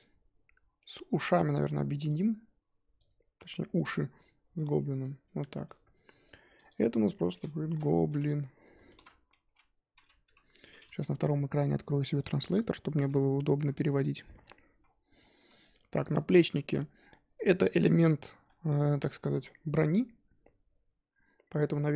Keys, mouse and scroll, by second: 2.1 shift+click, 3.0 shift+click, 4.5 ctrl+j, 5.2-6.6 middle drag, 6.7-11.1 drag, 14.8-15.2 scroll down 2, 15.2-15.7 scroll up 1, 15.7 click, 16.4 g, 17.6 scroll down 2, 17.7-21.9 middle drag.